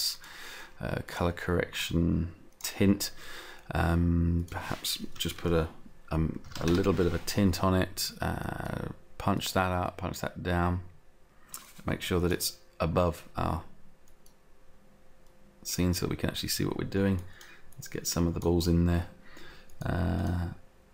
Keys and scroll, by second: 6.5 Return.